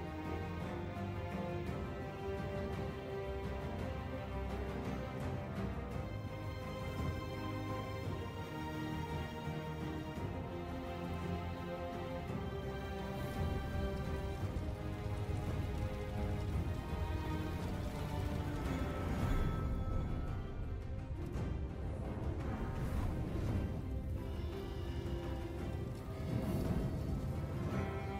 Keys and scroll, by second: 8.8 Delete, 15.1 Tab, 20.3 ctrl+j, 26.6 ctrl+j.